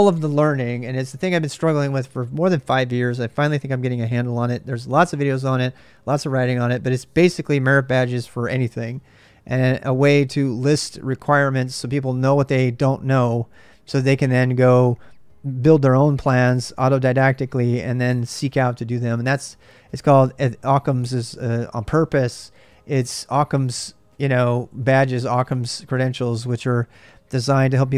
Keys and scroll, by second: 0.7-1.4 typing.